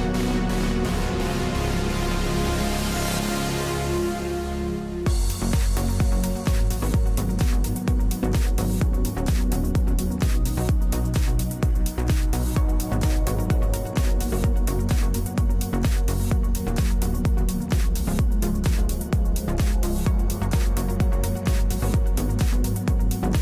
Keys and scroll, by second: 7.2 ctrl+g, 10.0 space, 11.0 space.